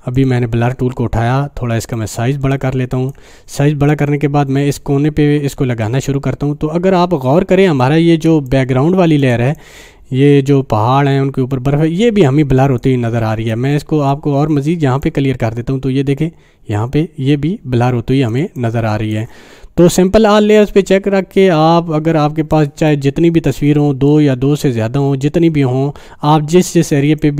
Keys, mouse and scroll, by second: 0.1 click, 2.0-3.2 alt+right drag, 4.9-7.5 drag, 5.9 click, 8.7-9.4 space, 9.4 space, 9.5-13.0 drag, 13.3 space, 13.5 click, 13.8-14.1 space, 15.0-18.5 drag, 18.4 space, 18.5-19.2 click, 18.9 space, 19.8-22.6 drag, 22.7 space, 22.9-23.5 click, 23.2 space, 23.6 space, 24.1-27.3 drag, 27.1 space, 27.2 click.